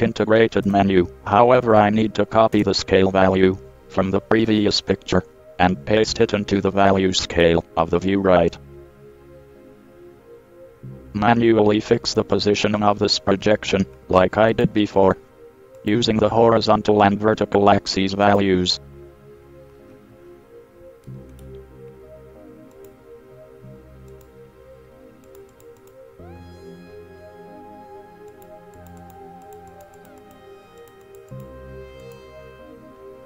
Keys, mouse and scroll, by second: 6.3 middle click, 7.0 middle drag, 7.2 middle click, 7.4 middle click, 11.0-14.7 middle drag, 14.7-17.7 drag, 18.4 click.